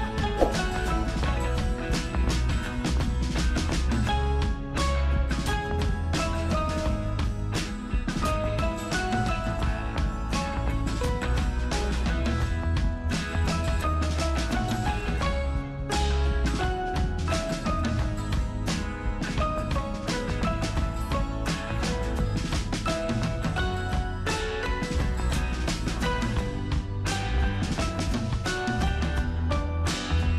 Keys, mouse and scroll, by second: 1.1 ctrl+super+o, 2.7 scroll down 1, 5.0-8.6 super+drag, 8.6 alt+super+scroll up 1, 9.3-13.7 super+drag, 13.7 ctrl+super+c, 14.7 super+click, 15.7 ctrl+super+v, 17.4 super+click, 19.2-21.5 super+drag, 21.5 ctrl+super+c, 21.9 super+click, 22.2 ctrl+super+v, 22.9-25.0 super+drag, 25.0 ctrl+super+c, 25.4 super+click, 25.8 ctrl+super+v, 26.2 super+click, 28.4-29.7 super+drag, 29.7 ctrl+super+c, 30.1 super+click.